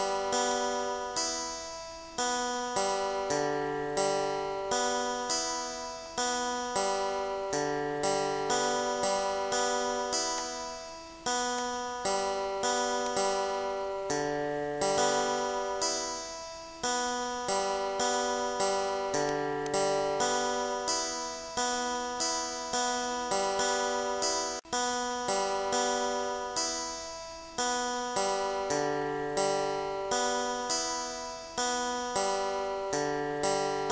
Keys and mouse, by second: 2.4 click, 3.1 click, 3.5-5.5 typing, 6.8 click, 7.9 click, 9.2 shift+click, 11.8 click, 13.3 click, 14.4 click, 15.9 Down, 21.0 Down, 31.3 click, 32.4 click, 33.5 Down.